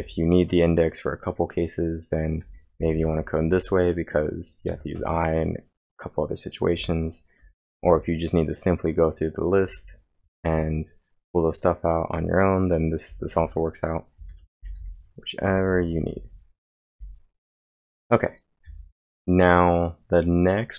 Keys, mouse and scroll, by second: 0.0-0.4 typing, 2.2-4.7 typing, 2.5 click, 2.5 scroll down 1, 6.8-8.3 typing, 14.5-16.9 typing, 18.7 typing.